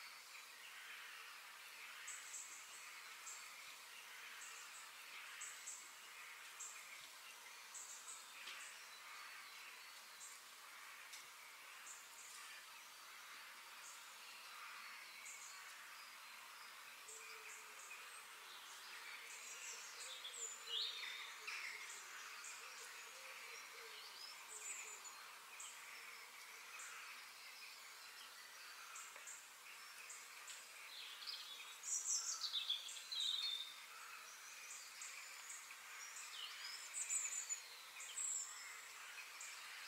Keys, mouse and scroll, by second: 8.6 KP_3, 9.7 shift+middle click, 10.1-10.6 scroll down 2, 10.6-12.1 shift+middle drag, 12.1-12.5 scroll up 2, 12.5-13.7 shift+middle drag, 13.7 g, 15.7-16.9 middle drag, 16.9-17.2 scroll up 2, 17.3 shift+middle click, 18.1 scroll down 1, 18.3-20.2 middle drag, 25.1-27.0 middle drag, 29.9-31.7 middle drag, 35.0-36.6 middle drag, 37.0 middle click, 37.8 r, 39.4 middle click.